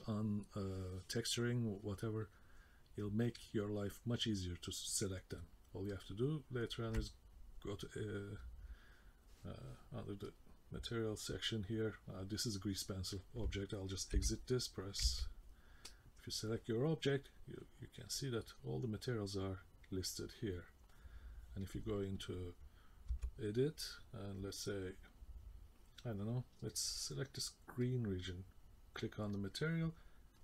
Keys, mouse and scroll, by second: 4.9 middle click, 5.9 middle click, 10.3 click, 13.1-14.1 scroll down 1, 14.1 k, 15.0 v, 15.9 click, 17.6 click, 23.1 Tab, 27.8 click.